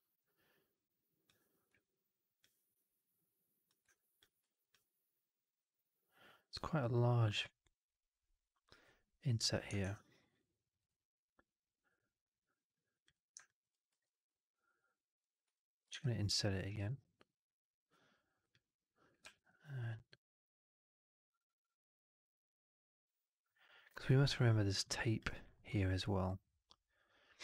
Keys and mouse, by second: 1.4 click, 1.6 w, 2.7 click, 3.8 click, 4.5 3, 4.6 click, 9.7 shift+Tab, 13.4 alt+click, 13.8 r, 15.4 middle click, 15.4 w, 15.8 shift+Tab, 19.1 r, 22.1-24.6 middle drag.